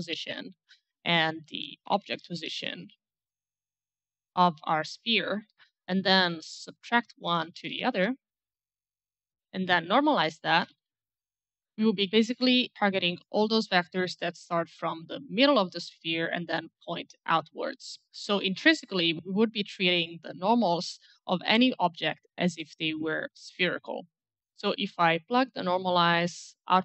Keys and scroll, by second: 1.5-4.5 typing, 6.9-8.3 typing, 10.2-11.5 typing.